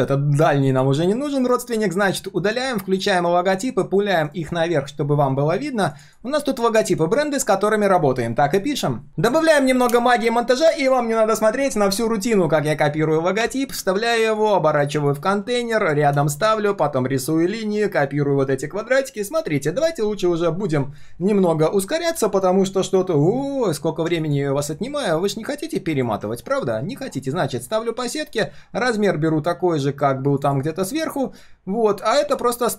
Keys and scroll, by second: 0.0 alt+l, 1.4 ctrl+shift+[, 4.1 ctrl+shift+], 24.5 ctrl+shift+4.